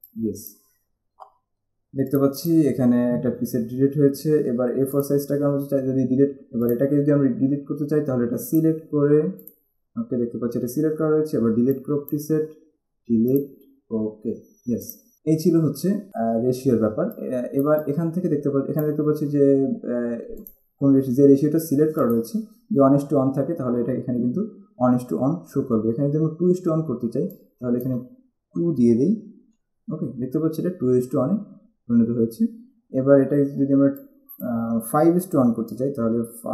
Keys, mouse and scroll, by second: 0.2 click, 2.3 click, 5.2 click, 6.8 click, 8.7 click, 11.9 click, 13.5 click, 15.0 click, 16.1 click, 17.3 click, 20.6 click, 22.2 click, 27.5 click, 29.6 2, 34.1 click.